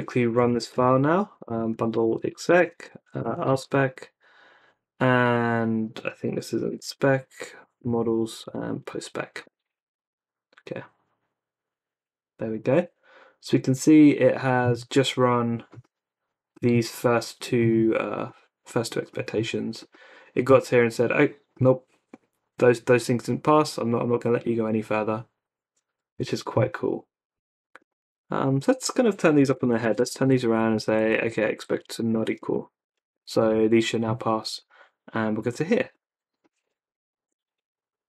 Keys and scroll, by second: 0.1-4.0 typing, 6.3-9.0 typing, 9.5 Return, 29.2-34.1 typing, 36.9 Up, 37.2 Return.